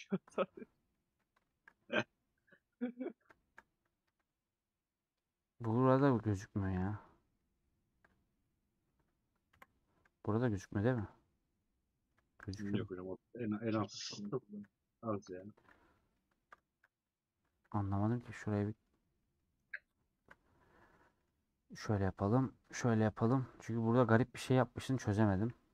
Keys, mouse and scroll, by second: 0.0 /, 0.3 middle click, 0.5 /, 0.9 middle click, 1.1 scroll up 1, 1.4 shift+middle click, 2.0 scroll up 1, 2.5-3.7 middle drag, 3.7-4.4 scroll up 3, 4.2 3, 4.4 middle click, 4.9-5.5 scroll up 2, 5.5-5.9 scroll down 1, 5.9 /, 6.2 scroll down 4, 6.5-12.5 middle drag, 12.5-13.0 scroll up 5, 13.0-15.7 middle drag, 15.7 /, 15.9 middle click, 16.2-16.6 scroll up 2, 16.6 shift+middle click, 16.8 scroll up 1, 17.2 scroll down 1, 17.3 scroll up 1, 17.5 3, 19.1 middle click, 20.1 KP_Decimal, 20.5-20.9 scroll down 2, 21.0 middle click, 21.2 3, 22.7 ctrl+KP_Add, 23.4-24.9 middle drag, 24.9 scroll down 1, 25.4 /.